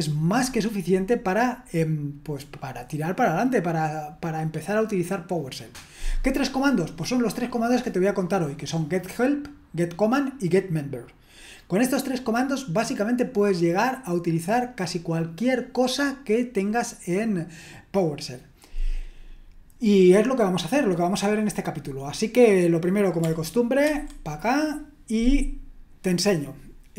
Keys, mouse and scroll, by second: 2.1-3.0 scroll down 1, 23.9 ctrl+1.